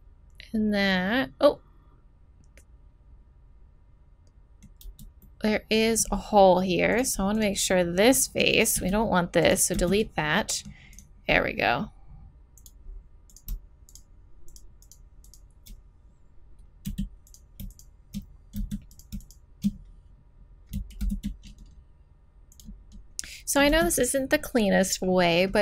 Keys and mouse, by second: 0.6 middle click, 1.1 middle click, 4.8 z, 5.4 middle click, 6.9 right click, 7.7 middle click, 8.8 x, 9.7 z, 10.1-12.2 drag, 16.9 f, 18.6 z, 21.0 alt+m, 23.7 z.